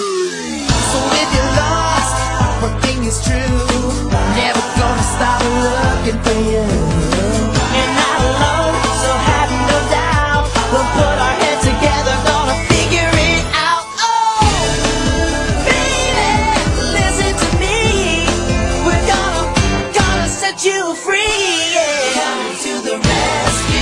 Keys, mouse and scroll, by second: 0.3-2.2 middle drag, 3.3-5.0 drag, 4.8-8.2 middle drag, 8.0-12.2 right drag, 11.6-13.2 middle drag, 13.2-15.0 drag, 15.7-16.8 middle drag, 16.8-18.4 drag, 18.6 middle click, 19.3-21.9 drag, 23.2 middle click.